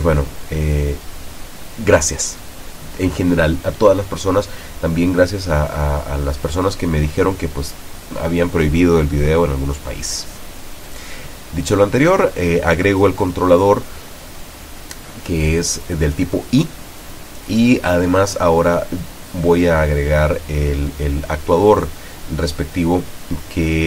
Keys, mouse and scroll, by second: 17.9-19.0 drag, 19.3 click, 20.2 click, 21.7-22.7 drag, 23.6-23.8 drag.